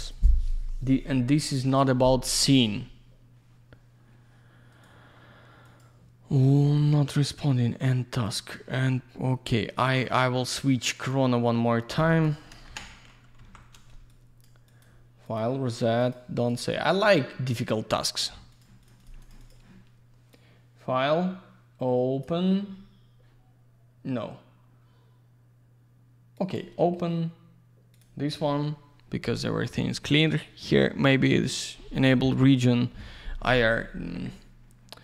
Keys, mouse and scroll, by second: 12.1 click, 12.2 click, 12.5 Delete, 13.2 typing, 14.1 click, 14.7 click, 14.8 click, 15.3 click, 15.4 click, 16.0 click, 16.1 click, 16.5 click, 16.6 double click, 18.5 click, 18.6 click, 18.8 click, 18.9 double click, 19.0 click, 19.0 click, 19.2 click, 19.3 double click, 19.4 click, 19.5 click, 20.3 click, 26.4 click, 27.9 click, 33.6 click.